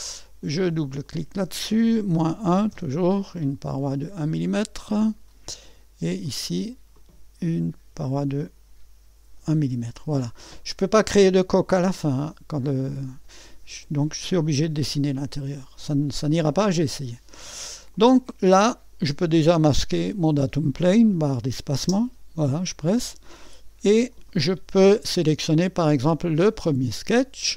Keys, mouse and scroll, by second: 0.9-1.9 drag, 2.1 -, 2.4 1, 2.7 Return, 4.3-7.9 drag, 7.9 -, 9.4-9.7 typing, 11.7-13.9 drag, 15.8-17.3 drag, 17.9-19.0 drag, 18.3 typing, 20.1 click, 21.8 space, 23.2 click, 26.1 click, 26.1 typing.